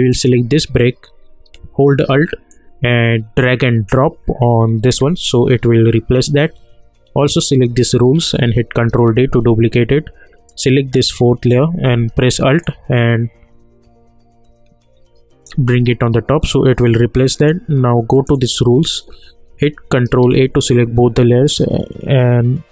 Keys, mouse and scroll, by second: 0.1 click, 2.5-7.3 alt+drag, 7.3-8.3 drag, 8.8 ctrl+d, 10.5 click, 12.6-17.3 alt+drag, 20.2 ctrl+a.